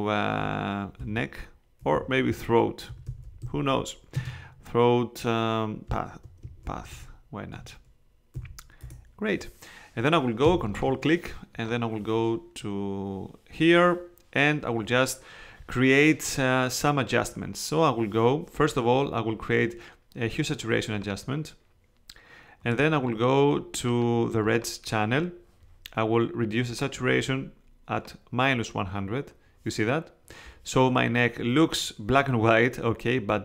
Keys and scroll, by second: 1.0-4.2 typing, 6.6 shift+p, 6.9 shift+a, 7.5 t, 8.3 h, 8.8 Return.